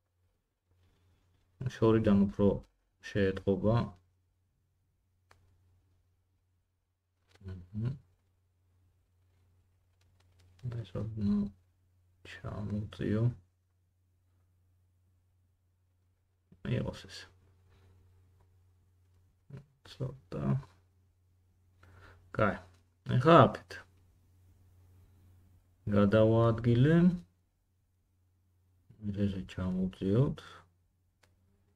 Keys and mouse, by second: 0.9 middle click, 0.9 right click, 1.2 g, 4.5 g, 11.9 middle click, 11.9 right click, 14.8 g, 25.3 middle click, 25.3 right click, 26.5 g, 29.4 g, 31.6 middle click.